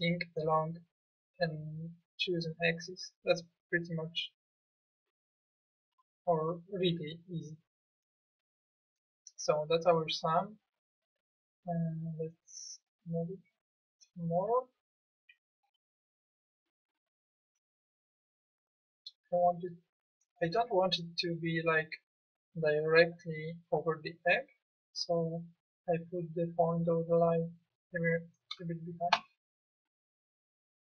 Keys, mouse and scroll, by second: 4.4 click, 5.5-6.5 drag, 8.1 middle click.